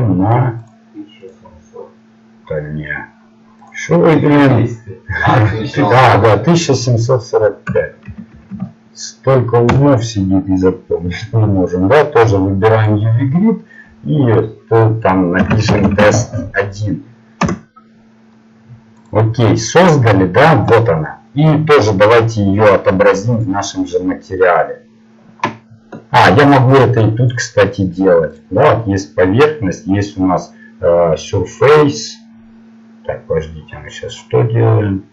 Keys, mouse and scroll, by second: 21.8 middle click, 23.9-25.1 drag.